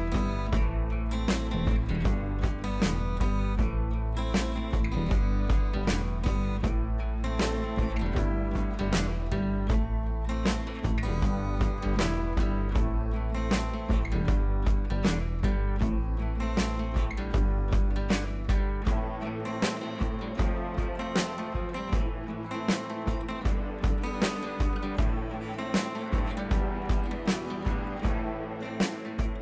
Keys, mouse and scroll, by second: 1.7 click, 2.3 scroll up 1, 2.6 scroll down 1, 3.6-3.9 scroll up 1, 5.3 scroll down 1, 6.9 click, 7.2 scroll up 1, 9.3 ctrl+alt+shift+e, 10.1 ctrl+shift+a, 15.2 click, 18.1-20.2 drag, 20.4-22.0 drag.